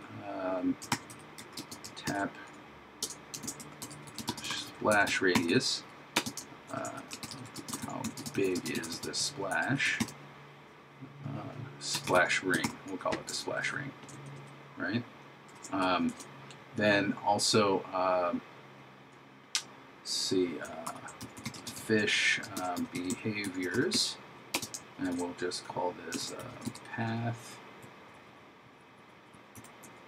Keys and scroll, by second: 1.0 shift+t, 2.1 shift+r, 3.5 shift+s, 4.6 shift+r, 6.7 shift+9, 7.3 shift+h, 14.4 shift+/, 15.5 shift+0, 20.9 shift+f, 22.6 shift+b, 25.1 shift+9, 26.3 shift+p.